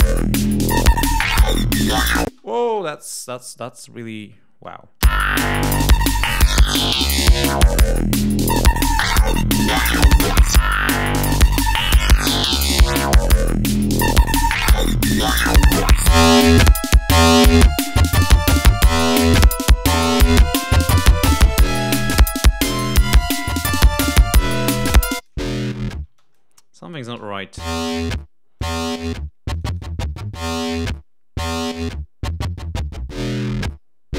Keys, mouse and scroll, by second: 2.2 space, 5.0 space, 10.8 click, 12.0-12.7 ctrl+scroll up 5, 14.1-14.4 scroll down 2, 14.5-15.1 scroll up 2, 15.3-15.6 scroll up 2, 16.2-16.5 scroll down 2, 17.4-18.6 drag, 18.7 click, 20.3 click, 21.0 click, 22.8 right click, 24.2 click, 25.2 click, 25.7 ctrl+scroll down 2, 26.1 ctrl+space, 26.2 ctrl+click, 27.5 l, 28.6 click, 29.5 click, 31.6 click.